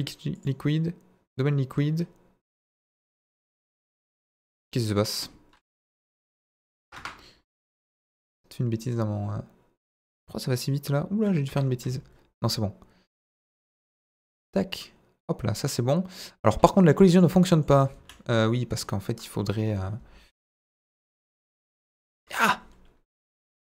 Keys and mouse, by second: 2.5 click, 4.9-7.3 drag, 8.8-11.6 drag, 13.1-16.1 drag, 17.1 click, 17.4 middle click, 17.7 Tab, 17.9 a, 18.4 middle click, 19.4 KP_1, 20.5 e, 20.5 middle click, 21.0 click, 21.3 s, 21.4 z, 21.6 KP_0, 22.1 Escape, 23.2 click, 23.6 s, 23.7 z.